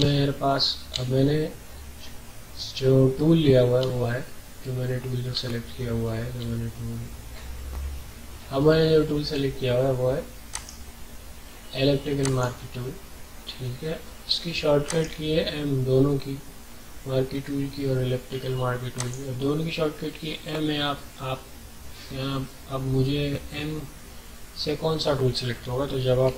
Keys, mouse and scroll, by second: 0.1 alt+scroll down 1, 1.0 alt+scroll down 1, 1.6 scroll up 1, 1.9 typing, 3.9 alt+scroll down 1, 4.0 typing, 5.4 alt+scroll down 1, 5.5 typing, 6.5 alt+scroll down 1, 7.2 scroll up 1, 8.7 ctrl+scroll up 1, 8.8 typing, 10.5 right click, 12.2 click, 14.8 right click, 18.9 click, 21.2 typing, 26.2 typing.